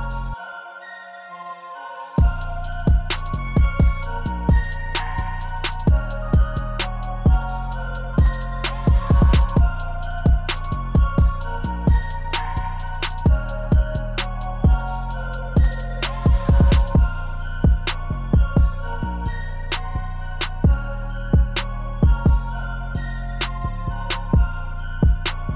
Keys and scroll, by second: 2.2 0, 4.7 0, 6.9 0, 9.9 0, 13.6 0, 20.3 ctrl+shift+c, 22.4-23.6 typing, 24.2 Return.